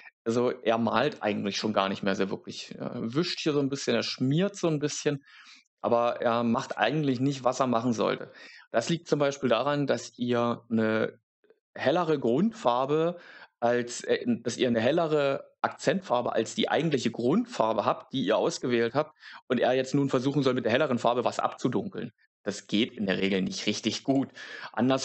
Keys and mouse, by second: 24.0-25.0 drag.